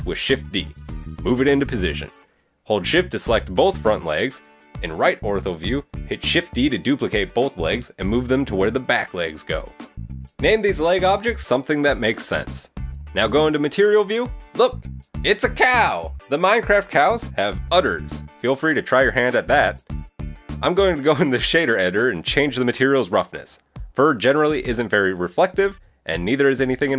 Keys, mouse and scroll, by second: 1.5 KP_3, 2.7 middle click, 4.2 shift+right click, 5.1 KP_1, 5.4 KP_3, 6.8 shift+d, 8.6 middle click, 9.6 right click, 10.0 middle click, 10.1 middle click, 10.2 click, 11.0 right click, 11.1 click, 11.9 click, 12.0 click, 12.4 click, 12.5 right click, 12.6 click, 12.7 click, 13.7 click, 13.9 middle click, 14.5 click, 15.3 click, 15.8 shift+middle click, 16.0 middle click, 16.7 middle click, 16.9-17.3 scroll up 3, 17.1 middle click, 18.0 middle click, 18.2 scroll down 3, 18.3 middle click, 18.5 shift+middle click, 19.3 click, 19.9 shift+middle click, 20.2 click, 21.7-22.2 scroll down 4, 25.3 click.